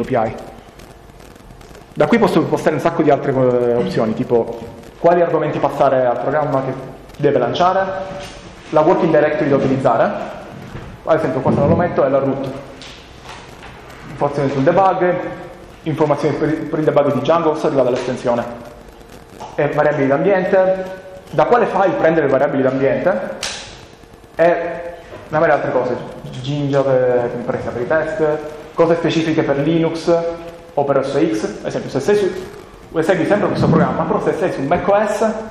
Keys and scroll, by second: 0.0-0.8 typing, 3.4 ctrl+space, 7.8 Down, 13.3 Down, 14.4 Down, 18.7 Down, 20.3 Down, 20.7 Down, 21.3 Up, 23.1 Down, 23.5 Down, 23.8 Down, 29.4 Up, 29.6 Up, 29.7 Up, 29.9 Up.